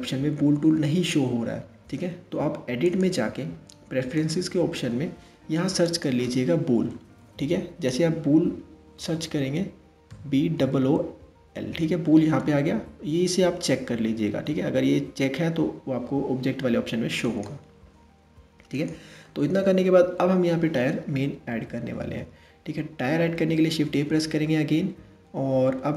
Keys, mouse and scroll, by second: 2.5-5.6 drag, 18.3 click, 18.9-21.9 middle drag, 23.5 shift+a.